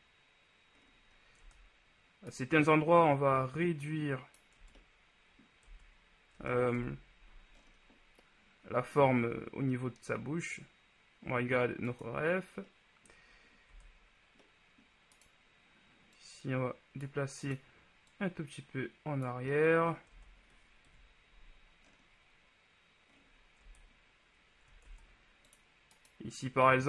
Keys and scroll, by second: 1.7 Tab, 4.8 Tab, 6.6 Tab, 6.9 KP_1, 13.9 Tab, 20.4 Tab, 21.0 KP_1, 23.8 Tab, 25.0 ctrl+Tab.